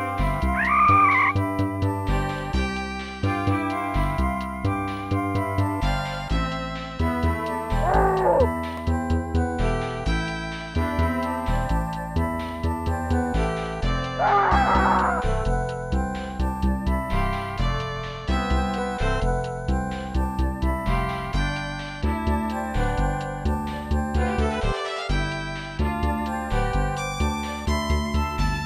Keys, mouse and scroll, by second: 3.7 click, 4.8 click, 7.9 click, 8.7-9.7 typing, 10.0 Return, 11.8 ctrl+z, 15.9 right click, 16.3 right click, 16.7 right click, 17.3 right click, 17.4 shift+right click, 17.7 right click, 17.8 shift+right click, 18.4 right click, 18.5 shift+right click, 18.9 right click, 19.0 shift+right click, 19.2 right click, 19.3 shift+right click, 19.8 right click, 19.9 shift+right click, 20.2 right click, 20.3 shift+right click, 20.5 right click, 20.6 shift+right click, 22.0 right click, 22.1 shift+right click, 22.8 right click, 22.9 shift+right click, 23.3 right click, 23.4 shift+right click, 23.6 right click, 23.7 shift+right click, 24.0 right click, 24.1 shift+right click, 24.4 right click, 24.5 shift+right click, 24.8 right click, 24.9 shift+right click, 27.1 right click, 27.2 shift+right click, 27.5 right click, 27.6 shift+right click, 27.8 right click, 27.9 shift+right click, 28.4 right click, 28.5 shift+right click.